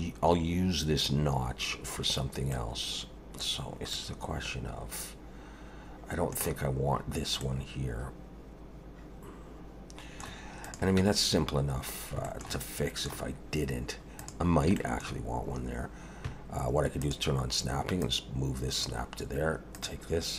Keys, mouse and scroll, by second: 2.5 middle click, 3.5 scroll down 2, 3.9 middle click, 7.4 middle click, 10.6 click, 11.0 Tab, 11.3-11.9 scroll up 3, 11.9-12.2 scroll down 1, 12.2 shift+middle click, 12.6 middle click, 14.2 click, 14.8 shift+middle click, 17.0 click, 18.0 click, 19.7 click.